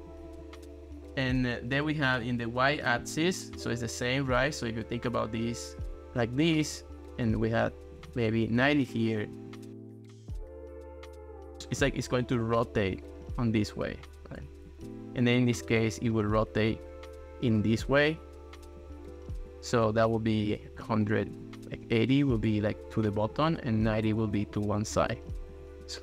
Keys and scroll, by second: 0.1 ctrl+x, 2.2 0, 2.7 Return, 8.0 9, 8.5 Return, 11.8 ctrl+s, 14.7 ctrl+x, 17.9 ctrl+s, 20.6-21.7 typing, 23.9 9, 24.1 Return, 25.3 ctrl+s.